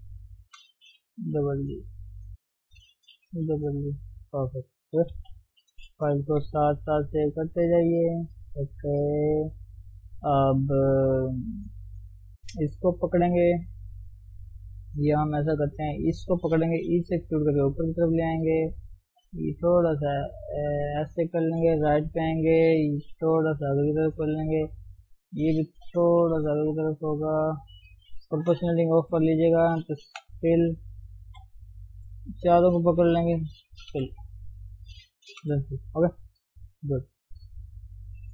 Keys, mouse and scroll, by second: 1.0 g, 2.2 click, 3.3 g, 4.0 Tab, 4.1 scroll down 1, 4.3 middle click, 5.1 KP_1, 5.3-6.4 scroll up 2, 6.4 ctrl+shift+s, 7.4 ctrl+shift+s, 7.6 scroll up 2, 7.9 Tab, 8.4 shift+middle click, 8.6-11.1 scroll up 2, 11.5 click, 15.9-16.9 shift+middle drag, 16.9 e, 19.4 g, 21.6 KP_3, 21.9-23.1 scroll up 1, 23.1 scroll up 3, 23.2 g, 24.9 click, 26.0 g, 27.7 shift+middle click, 28.5 o, 29.4 shift+click, 30.2 f, 31.3 ctrl+z, 32.1 shift+Left, 32.4 shift+Left, 32.9 shift+Left, 33.3 shift+Left, 33.9 f, 34.3 Left, 35.4 f, 35.6 scroll down 3, 35.7-36.7 middle drag, 36.7 KP_1, 37.1-37.8 scroll up 1, 37.8 scroll up 1, 38.1 click.